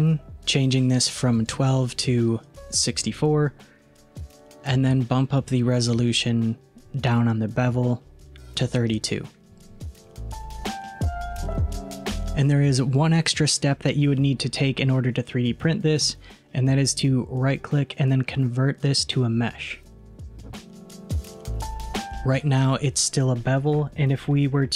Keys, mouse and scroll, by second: 1.5-3.7 drag, 3.7-6.1 scroll down 6, 7.8-10.2 drag, 10.5-12.1 middle drag, 15.1-16.9 middle drag, 16.9-20.0 right drag, 23.7-24.7 middle drag.